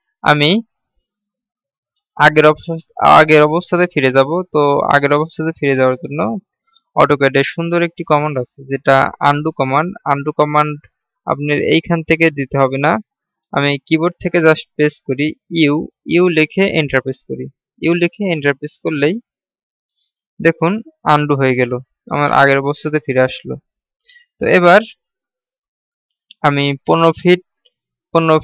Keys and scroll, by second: 16.0 u.